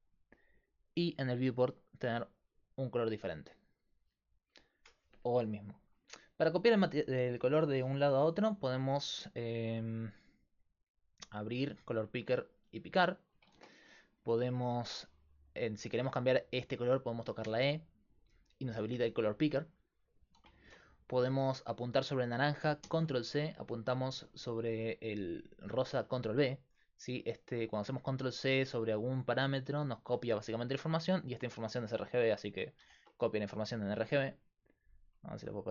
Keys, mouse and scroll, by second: 10.6-13.6 drag, 13.6 ctrl+z, 17.5 e, 20.6 ctrl+z, 22.9 ctrl+c, 25.9 ctrl+v, 32.8 ctrl+c, 35.2-35.7 drag.